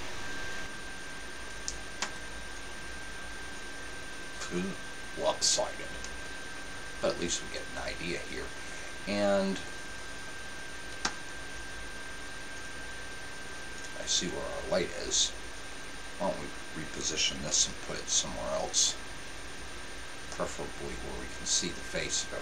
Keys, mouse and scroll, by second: 2.2 KP_0, 6.8-9.6 middle drag, 6.8-7.8 scroll up 1, 11.0 KP_7, 12.8-13.7 scroll down 1, 13.7-15.1 middle drag, 15.1-15.6 scroll up 1, 15.6-17.3 right drag, 17.6 g.